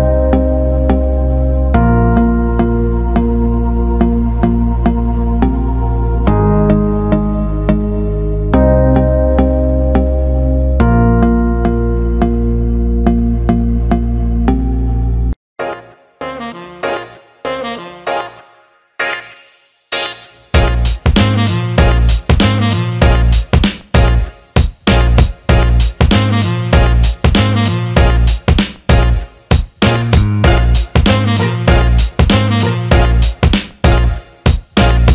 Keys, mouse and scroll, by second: 1.3-2.3 alt+middle drag, 2.8-3.3 alt+middle drag, 4.6 alt+middle drag, 5.3 alt+middle click, 5.8 shift+a, 11.3 click, 13.5 s, 13.7 alt+middle click, 14.8 middle click, 15.1 middle click, 15.7 click, 16.6 click, 17.6-19.2 drag, 20.6 click, 21.1 click, 21.7 alt+middle drag, 22.1 alt+shift+middle click, 22.7 click, 24.7 click, 27.0 click, 33.7 click, 34.6 click.